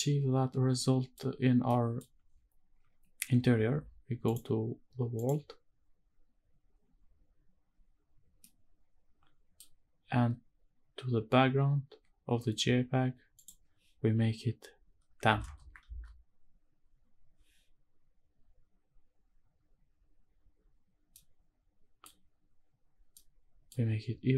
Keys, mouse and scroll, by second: 0.7 scroll down 1, 0.8 middle click, 1.7 middle click, 2.2 scroll up 1, 4.2-5.4 drag, 6.8-8.3 scroll down 1, 8.3 scroll down 1, 8.4-9.6 middle drag, 13.3-15.8 drag, 21.1 middle click, 23.1-23.7 middle drag.